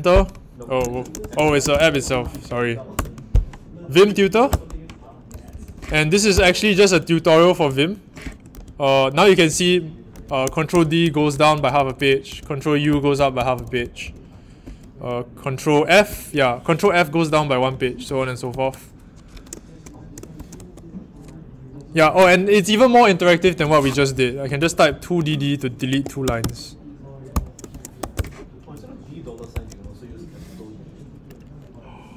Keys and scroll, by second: 0.0-3.4 typing, 4.4 Return, 5.3-5.6 typing, 6.3 ctrl+alt+Return, 6.8-8.4 typing, 8.4 ctrl+d, 9.1 ctrl+d, 10.1 ctrl+d, 10.4 ctrl+d, 12.9 ctrl+u, 15.9 ctrl+e, 20.0-21.0 typing, 22.0 Return, 22.2-28.4 typing, 29.5 ctrl+alt+Tab.